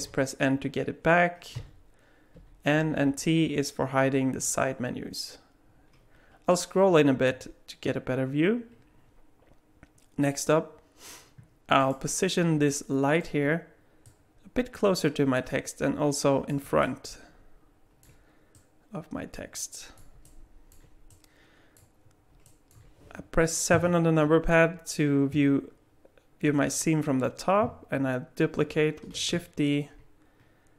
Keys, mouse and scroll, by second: 0.0 n, 1.6 n, 2.4 n, 2.8 n, 3.0 t, 6.8-7.8 scroll up 2, 7.8-10.8 scroll up 1, 11.8 click, 12.7 middle click, 14.0 click, 16.8 middle click, 18.6 click, 20.2 middle click, 21.1 click, 22.4 alt+middle click, 23.7 KP_7, 29.2 shift+d.